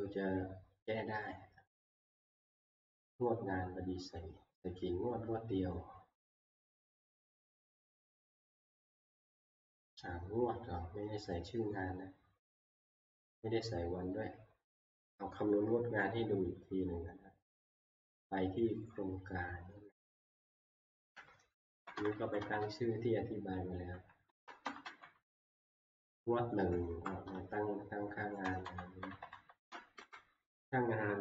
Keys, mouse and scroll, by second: 0.0 click, 2.9 click, 7.5-12.5 drag, 18.7 click, 20.7 click, 21.8 Right, 22.0 Right, 22.1 Right, 22.4 Right, 22.6-23.9 Right, 24.3 Right, 24.5-25.7 drag, 24.6 Right, 24.8 Right, 25.4-26.7 Left, 26.9 Left, 27.3 Right.